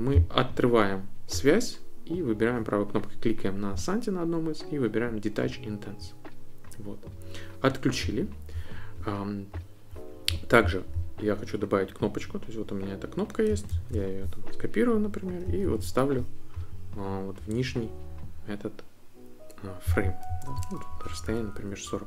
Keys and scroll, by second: 13.7 super+c, 15.6 super+v, 20.9 alt+Down.